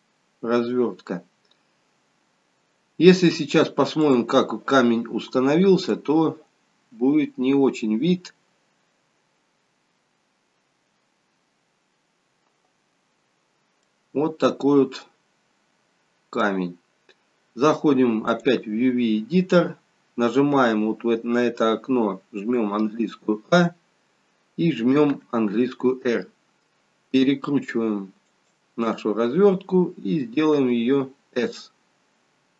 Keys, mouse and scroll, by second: 4.1 click, 4.1-4.5 scroll down 5, 13.9 middle click.